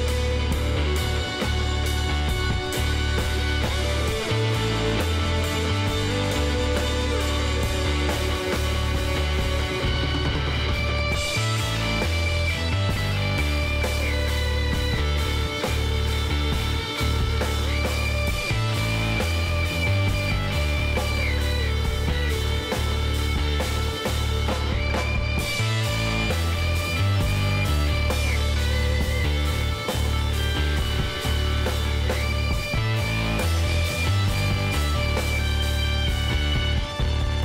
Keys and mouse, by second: 1.0 KP_3, 3.4-6.9 middle drag, 7.7-9.3 drag, 8.1 Tab, 9.3 middle click, 11.0 KP_1, 11.4 z, 13.8 ctrl+r, 17.0 ctrl+r, 20.9 ctrl+r, 22.7-25.5 middle drag, 23.3 ctrl+r, 25.5 z, 25.6-26.8 drag, 27.5-28.7 drag, 28.7-33.4 middle drag, 31.6 s, 35.6 Tab, 35.7-37.4 middle drag.